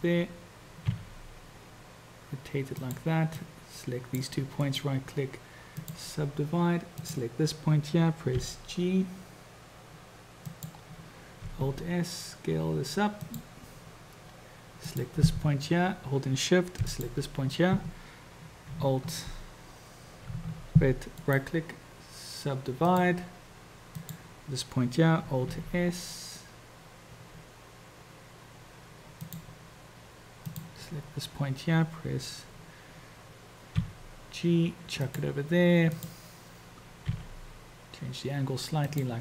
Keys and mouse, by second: 0.9 r, 3.5-4.4 drag, 4.7-6.1 drag, 7.1 click, 8.5 g, 11.6 alt+s, 14.9 click, 16.8 shift+click, 21.2-23.3 drag, 24.0 drag, 25.5 alt+s, 30.4 click, 33.7 g, 36.0 click, 37.1 r.